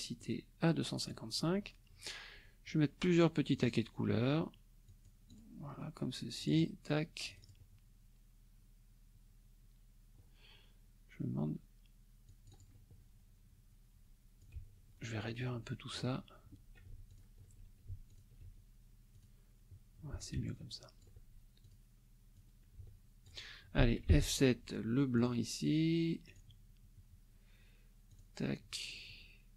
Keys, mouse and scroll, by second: 0.2 click, 3.5 click, 4.9 click, 6.4 click, 7.3 click, 12.3 click, 14.4-16.1 ctrl+drag, 17.1 ctrl+alt+click, 18.1 ctrl+alt+click, 19.1 click, 20.2 ctrl+click, 21.6 ctrl+click, 22.3 click, 24.1 F7, 25.1 click, 26.3 click, 28.1 click.